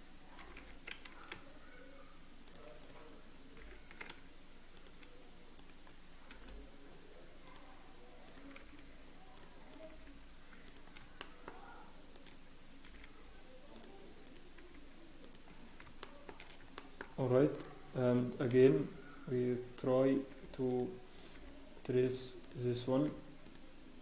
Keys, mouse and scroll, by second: 0.4 g, 3.6 click, 3.6 g, 5.5 click, 6.3 g, 8.2 click, 9.7 click, 9.9 g, 11.2 shift+middle click, 11.6 scroll up 1, 12.1 click, 12.8-13.2 scroll up 1, 12.8 g, 14.2 click, 14.5 g, 15.6 scroll down 1, 16.0 shift+middle click, 16.3 scroll down 3, 16.7 shift+middle click, 17.0-17.5 scroll up 3, 17.5 click, 18.5-20.1 scroll up 1, 18.5 g, 20.5 g, 21.3 click, 21.3 g, 22.4 click, 23.0 g.